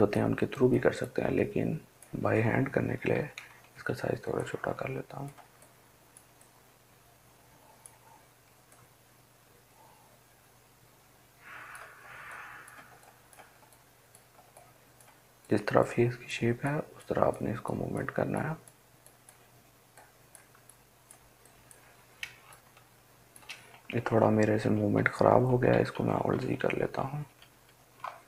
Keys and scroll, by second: 3.3 [, 3.6 [, 3.8 [, 4.1 [, 22.9 |, 24.8 ctrl+alt+z, 25.2 ctrl+alt+z, 25.4 ctrl+alt+z.